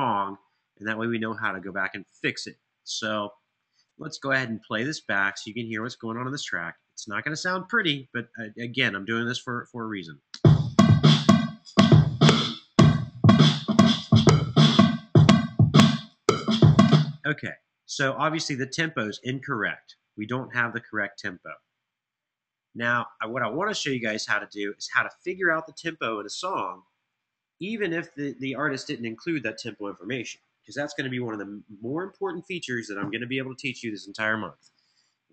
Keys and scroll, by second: 10.0 space, 16.6 space.